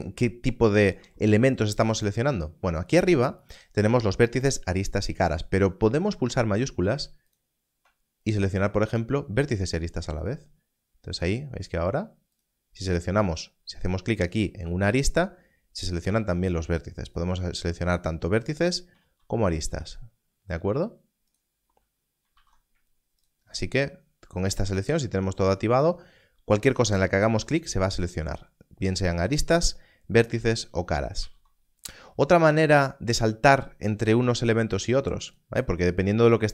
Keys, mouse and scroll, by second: 0.8 alt+a, 6.3 alt+a, 7.2 shift+click, 10.1 shift+click, 17.0 shift+click, 18.4 shift+click, 20.6 g, 21.3 right click, 22.3 alt+a, 26.0 click, 31.1 alt+a, 32.7 click.